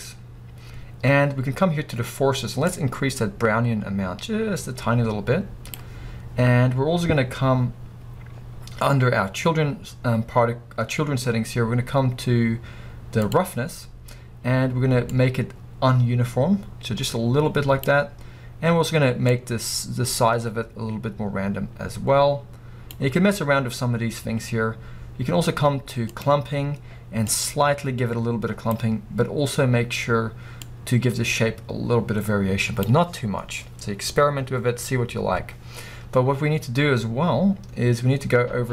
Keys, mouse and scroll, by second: 3.0-38.7 drag, 34.1 scroll down 1.